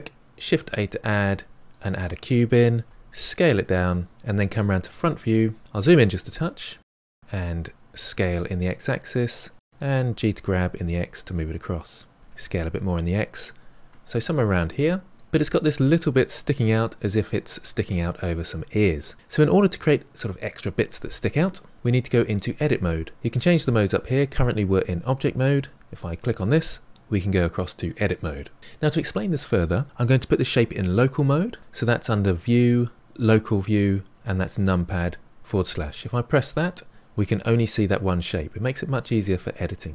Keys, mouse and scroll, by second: 0.4 shift+a, 2.8 s, 4.8 KP_1, 6.0-6.4 scroll up 4, 6.4-7.2 shift+middle drag, 7.2 s, 10.0 g, 12.2 s, 14.3-15.1 middle drag, 25.9-26.9 drag, 28.8 middle click, 32.4 click, 37.1-39.9 middle drag.